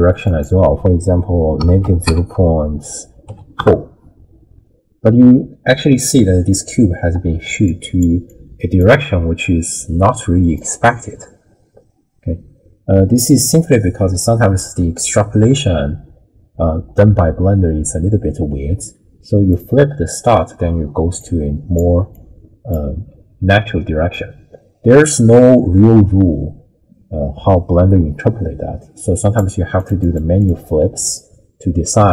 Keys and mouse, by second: 0.3-3.6 drag, 5.3-6.6 middle drag, 7.1 d, 7.6-9.1 d, 7.6 click, 8.3 click, 10.6-14.6 drag, 19.5 click, 20.7 d, 21.2-23.0 d, 21.2 click, 22.1 click, 24.2-29.4 drag, 29.8 click, 30.0 click, 30.4 click.